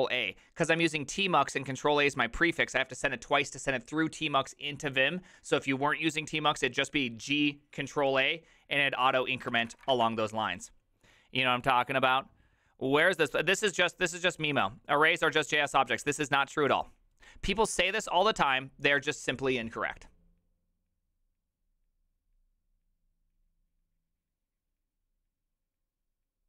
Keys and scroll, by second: 9.6 ctrl+c, 9.6 ctrl+:, 9.7 w, 9.7 Return.